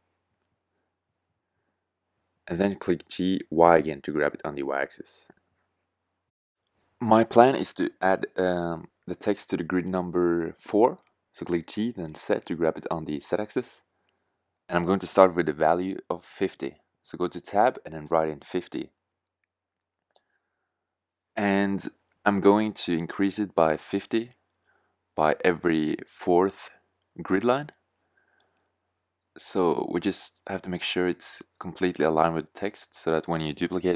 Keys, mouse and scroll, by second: 1.6 click, 4.9 g, 6.2 click, 6.6 g, 11.7 g, 15.8 Tab, 16.4-17.1 BackSpace, 17.3 BackSpace, 18.0 KP_5, 18.2 KP_0, 19.8 Tab, 21.9 g, 24.1 g, 27.8 g.